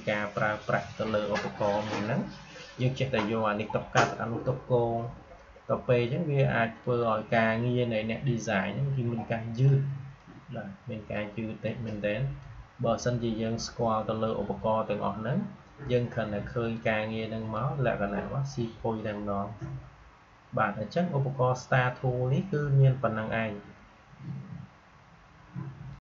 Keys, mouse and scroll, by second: 6.0-14.9 drag, 16.7-20.0 drag, 25.9 click.